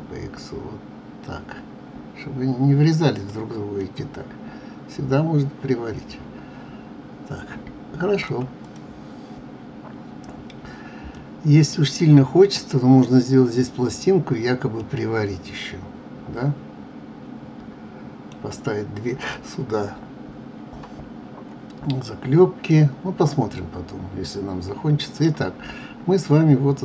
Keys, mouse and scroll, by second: 3.8-6.8 middle drag, 8.6 click, 11.1-14.2 middle drag, 14.8-17.8 middle drag, 22.8-25.7 middle drag, 25.7 scroll up 2, 26.6-26.8 scroll up 1.